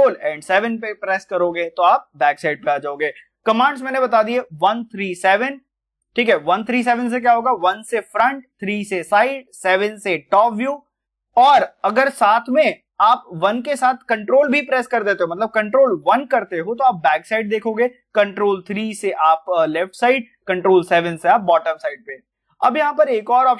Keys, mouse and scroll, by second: 22.7 scroll up 1.